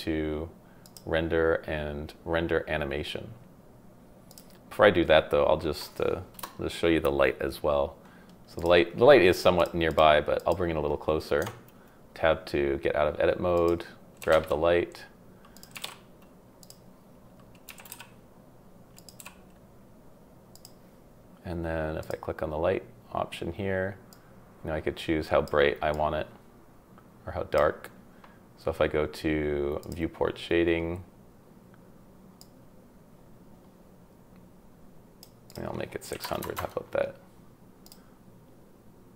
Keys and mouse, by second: 0.8-4.0 middle drag, 4.3 middle click, 6.4 KP_0, 9.9 click, 10.4 click, 11.4 Tab, 14.2 g, 14.3 z, 15.5 click, 15.7 g, 17.7 g, 17.9 y, 18.9 click, 19.2 g, 22.0 click, 24.1-25.6 drag, 25.9-27.5 drag, 29.8 click, 32.4-35.2 drag, 35.5-36.5 drag, 36.4 KP_0, 37.8 click.